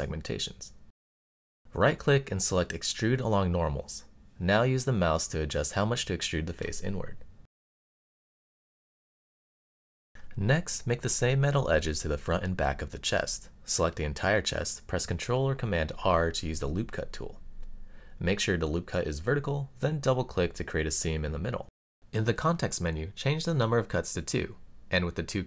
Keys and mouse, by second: 1.9-3.0 right drag, 7.0 click, 7.5-9.5 middle drag, 10.1 middle click, 11.9 a, 12.4 middle click, 13.8 super+r, 22.2 click, 23.4-24.7 drag.